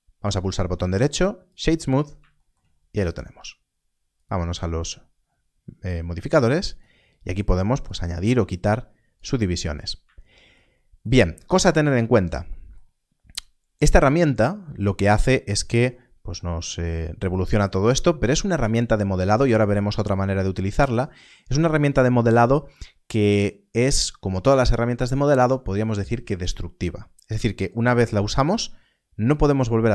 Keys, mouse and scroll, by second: 0.3 right click, 1.4 click, 2.6-4.1 scroll down 1, 4.1 click, 6.6 click, 11.6 Tab.